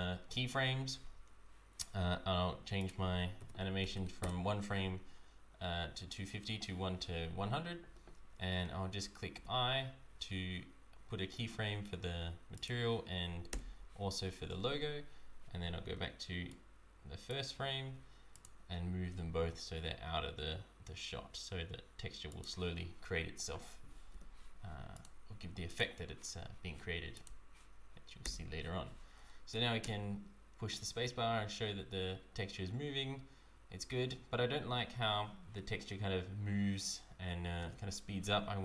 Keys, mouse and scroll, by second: 2.8 click, 3.9 KP_0, 12.5 click, 13.5 i, 16.5 right click, 18.3 shift+click, 19.0 g, 24.9 click, 25.6 click, 28.2 i, 29.8 space, 37.6 space.